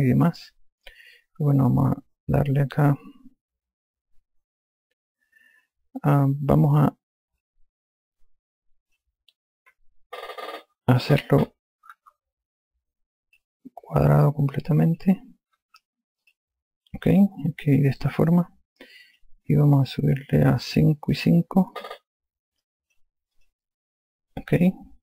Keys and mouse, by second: 2.9 click, 8.6 click, 12.4 KP_3, 13.9 click, 15.2 click, 16.1 KP_3, 16.9 click, 19.6 click, 21.5 click, 22.8 KP_5, 23.3 click, 23.7 KP_5, 24.0 click.